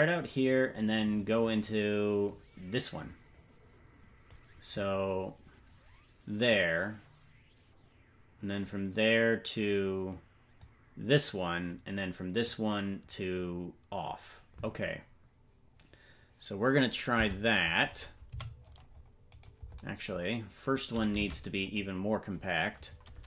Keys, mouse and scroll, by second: 1.1-2.3 drag, 2.9-4.3 drag, 4.7-6.5 drag, 8.6-10.1 drag, 10.6-11.7 drag, 12.4-14.0 drag, 17.1 Tab, 17.9 right click, 18.3 c, 21.1 Tab, 21.6 click.